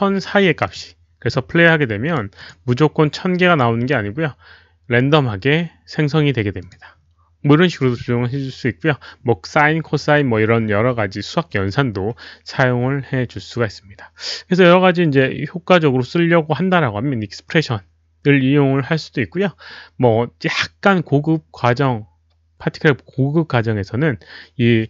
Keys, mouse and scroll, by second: 0.7 click, 1.7-2.5 typing, 2.3 click, 3.4 click, 4.8 Right, 4.8 click, 4.8 shift+o, 5.7 click, 5.7 shift+o, 6.6 click, 6.6 shift+0, 7.4 click, 7.4 click, 11.5 click.